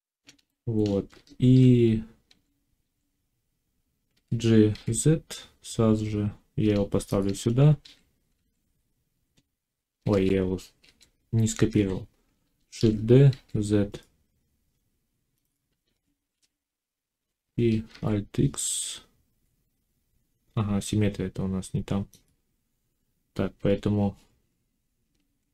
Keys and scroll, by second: 1.0 Tab, 2.1 a, 4.0 g, 4.6 z, 7.6 a, 10.0 ctrl+z, 12.6 shift+d, 13.2 z, 15.7 a, 17.8 alt+x.